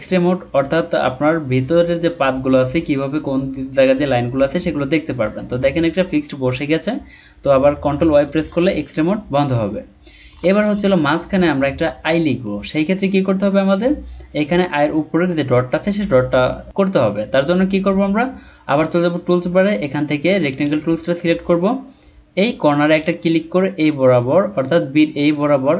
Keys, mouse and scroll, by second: 8.4 ctrl+y, 10.4-10.9 alt+scroll up 1, 11.2-12.8 scroll down 1.